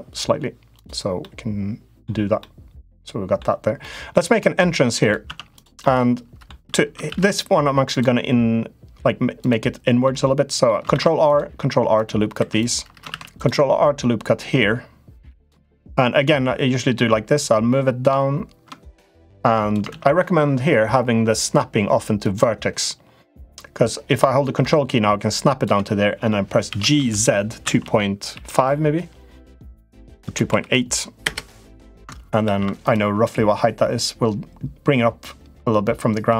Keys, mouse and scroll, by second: 0.5 click, 0.9 middle click, 2.3 middle click, 3.5 middle click, 4.0 middle click, 4.8 click, 5.0 Tab, 5.3 click, 5.5 middle click, 6.8 ctrl+r, 9.9 middle click, 10.7 ctrl+r, 12.2 3, 12.3 click, 12.8 ctrl+r, 16.0-19.5 drag, 19.6 ctrl+z, 21.2-22.3 drag, 23.3-25.4 drag, 26.4 g, 32.2 ctrl+r.